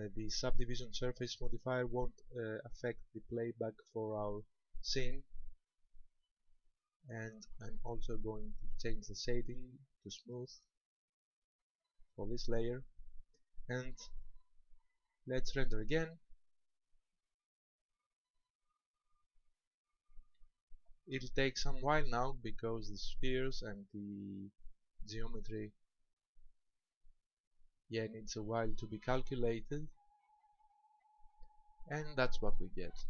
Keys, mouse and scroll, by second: 10.2 click, 14.1 click, 15.6 click.